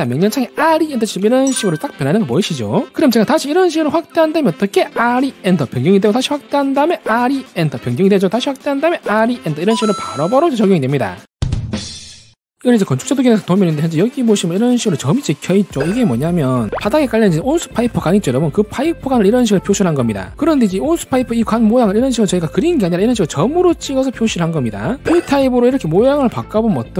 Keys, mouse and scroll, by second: 0.6-1.6 typing, 4.0-4.6 scroll up 2, 4.9-5.9 typing, 5.6 click, 6.5-6.8 scroll up 2, 7.2 r, 7.5 e, 7.7 click, 8.6-8.9 scroll up 3, 9.1 r, 9.4 e, 9.7 right click, 10.0-10.4 scroll up 1, 14.3-14.7 scroll up 2, 15.0 scroll down 1, 15.4-15.8 scroll up 2, 16.1 middle click, 18.5-19.0 scroll down 2, 19.2 middle click, 19.8 scroll up 1, 22.4 scroll up 3, 23.0 middle click, 23.5 scroll down 1, 23.8 middle click, 24.3 scroll up 1, 26.1 click.